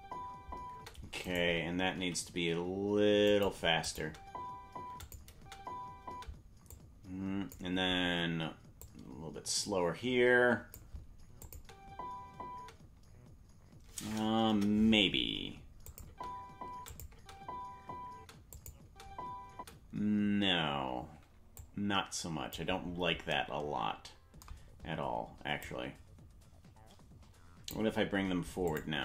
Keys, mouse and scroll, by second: 1.2 right click, 1.2 space, 2.0 g, 3.9 click, 4.0 space, 5.0 click, 5.0 space, 5.3 space, 6.7 click, 8.8 click, 11.4 click, 11.5 space, 12.6 space, 14.5 KP_0, 15.9 click, 16.0 space, 16.9 click, 16.9 space, 18.5 click, 18.5 space, 18.8 space, 21.6 click, 21.6 space, 25.6 click, 28.7 click, 28.8 space.